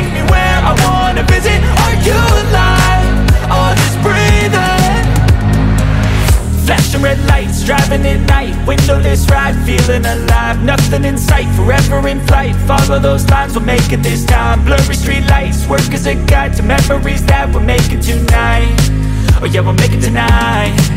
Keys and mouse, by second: 0.7 click, 1.8 click, 3.7 F12, 4.7 ctrl+s, 7.0 click, 8.6 click, 11.8 ctrl+a, 14.2-16.2 drag, 19.6 F12.